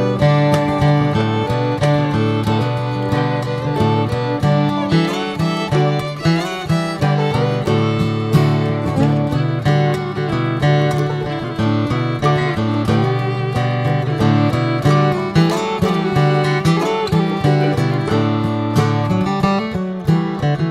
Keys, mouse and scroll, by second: 0.7 click, 1.9 middle click, 2.5 click, 2.8 middle click, 3.2 s, 5.5-7.6 middle drag, 7.6 Tab, 7.9 middle click, 8.2 Tab, 8.4-9.8 middle drag, 9.8 click, 10.4 s, 11.3 click, 11.6 Tab, 12.0 middle click, 12.3 click, 12.5-14.5 right drag, 14.5 click, 14.9 click, 15.1 middle drag, 15.4 Tab, 15.7 middle click, 15.9 scroll up 2, 16.2 shift+middle click, 17.0 3, 17.2 click, 18.0 shift+click, 18.5 middle click, 19.0 Tab, 19.3 Tab, 19.6 click, 19.9 scroll down 1, 20.2-20.7 middle drag.